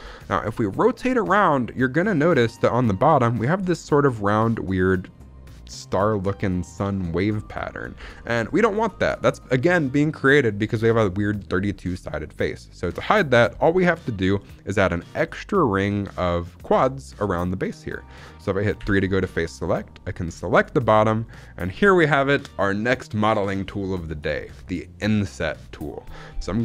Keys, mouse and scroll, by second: 0.5 middle click, 1.4 shift+middle click, 1.7 middle click, 2.1 shift+middle click, 2.2-2.7 scroll up 2, 2.7 scroll down 1, 3.0 middle click, 8.0 scroll down 1, 8.1 shift+middle click, 8.4 middle click, 8.8 shift+middle click, 8.9-10.9 scroll up 3, 11.9 middle click, 18.7 3, 20.4 click.